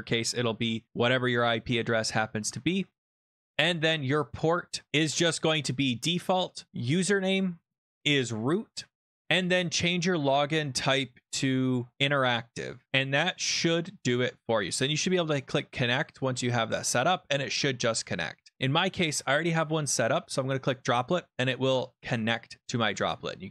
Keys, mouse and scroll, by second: 2.4 alt+Tab, 3.8 click, 4.9 click, 8.2 click, 8.6-9.5 typing, 9.2 click, 9.6 click, 11.9 click, 12.6 click, 18.5 click, 19.5 click, 20.7 click, 23.1-23.5 scroll down 14.